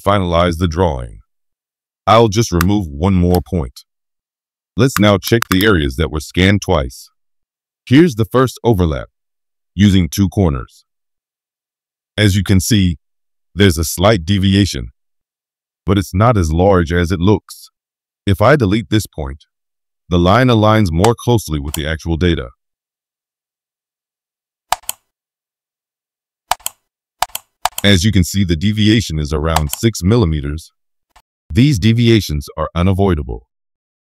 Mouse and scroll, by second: 2.6 right click, 4.9 middle click, 5.4 middle click, 5.5 middle click, 8.2 middle click, 8.2-8.5 scroll up 1, 9.8-10.4 scroll down 3, 17.0-17.4 scroll down 1, 21.0 right click, 24.3 middle click, 24.3-24.6 scroll up 2, 24.7 middle click, 24.7 scroll, 26.4 click, 27.2 click, 27.6 click, 29.5 middle click, 31.0-34.0 drag.